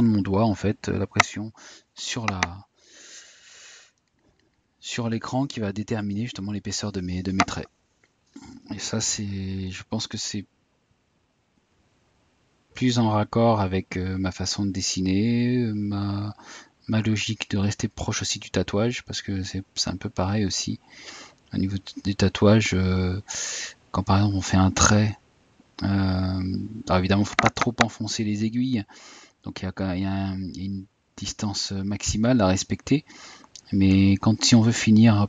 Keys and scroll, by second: 3.3 Tab, 27.7 Tab, 32.3 Tab.